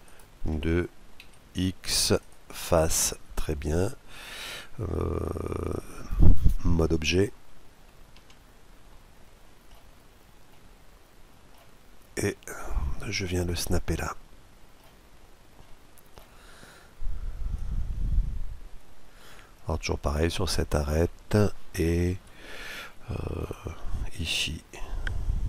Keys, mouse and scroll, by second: 0.9 x, 2.5-4.2 middle drag, 7.8 Tab, 8.5-11.9 middle drag, 12.2-14.2 drag, 13.6-17.2 middle drag, 17.2-18.9 drag, 20.1-22.1 middle drag, 21.9 KP_Decimal, 22.5-24.2 middle drag, 24.0-25.4 drag.